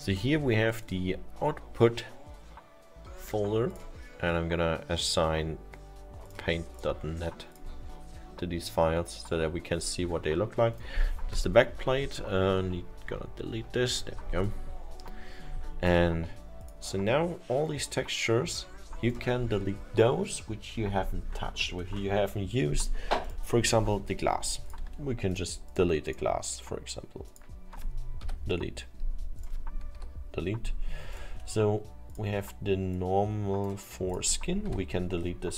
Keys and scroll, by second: 12.0 Delete, 29.9 Delete, 34.7 Delete.